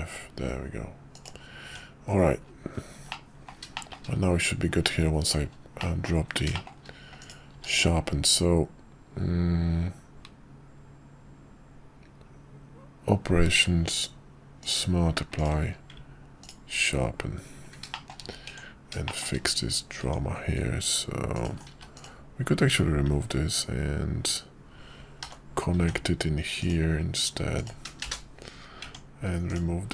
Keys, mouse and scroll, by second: 1.6 Tab, 3.1-3.5 middle drag, 3.7 middle drag, 5.8 middle click, 6.5 shift+middle drag, 7.5 q, 15.4 click, 15.6 q, 17.9 shift+middle drag, 18.5 Tab, 19.0 shift+middle click, 21.4 alt+click, 21.7 x, 23.1 Tab, 25.2 l, 25.8 k.